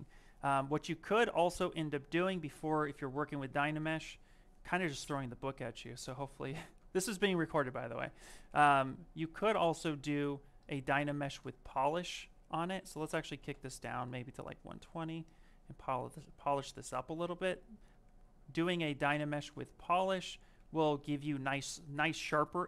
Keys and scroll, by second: 3.2 ctrl+z, 6.0 ctrl+z, 17.0 shift+f.